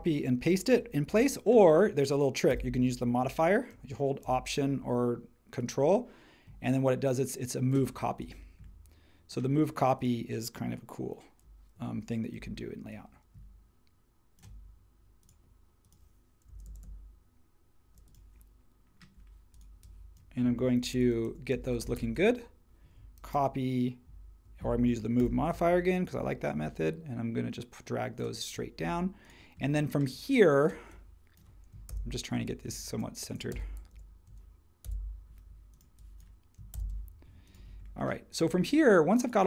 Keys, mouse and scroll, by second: 2.5 m, 16.5 Left, 16.6 Left, 16.8-17.9 Left, 20.8 shift+Left, 20.9 shift+Left, 21.6 shift+Up, 21.8 shift+Up, 21.9 shift+Up, 23.3 super+c, 25.2 m, 31.9 shift+Left, 32.9 shift+Right, 33.9 shift+Down, 34.8 Up, 36.7 shift+Up.